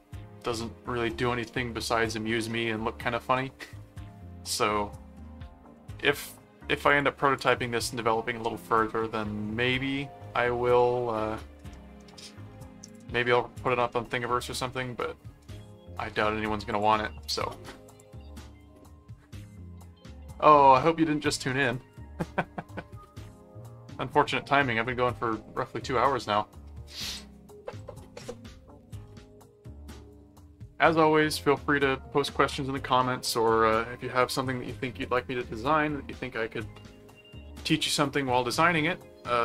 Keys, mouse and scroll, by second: 5.7 middle click, 6.9 click, 7.8-9.3 middle drag, 9.9-11.0 middle drag, 11.7 middle click, 12.9 click, 13.6 click, 14.2 middle click, 16.7 click, 17.9 click.